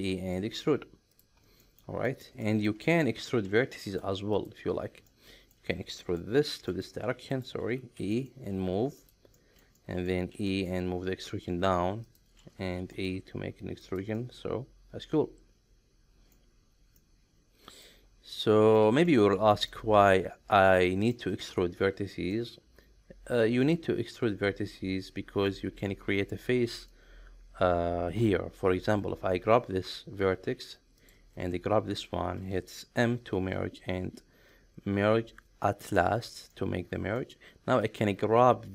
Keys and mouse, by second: 0.3 middle click, 1.6 middle click, 2.1 shift+middle click, 2.4 middle click, 3.0 1, 3.8 middle click, 4.3 click, 5.1 middle click, 6.0 middle click, 6.5 r, 6.7 middle click, 7.3 right click, 8.0 e, 8.1 middle click, 9.0 click, 9.4 shift+middle click, 9.8 middle click, 10.3 e, 10.5 middle click, 12.0 click, 12.8 e, 12.9 middle click, 13.8 drag, 14.1-16.3 middle drag, 17.0-17.9 middle drag, 18.4-18.8 middle drag, 19.0 shift+middle click, 19.7-21.1 middle drag, 22.3-25.5 middle drag, 30.9 shift+click, 33.0 m, 36.5 middle click, 37.8-38.7 drag.